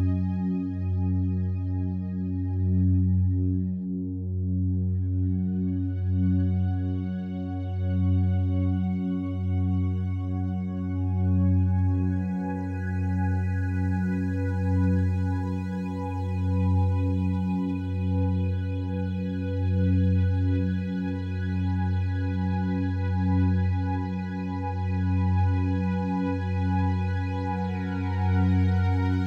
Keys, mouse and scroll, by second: 0.5-0.9 typing, 2.7 click, 3.4-3.7 typing, 5.1 click, 7.4-8.6 alt+drag, 8.9-10.8 alt+drag, 10.6 typing, 12.0 alt+click, 13.0 alt+click, 13.8-14.9 alt+shift+drag, 14.9 typing, 15.6-17.3 alt+shift+drag, 17.3-17.6 typing, 18.4 Escape, 18.7-19.4 typing, 20.3 click, 21.1 typing, 22.6 click, 23.9 click, 27.3 click, 28.2-29.1 typing.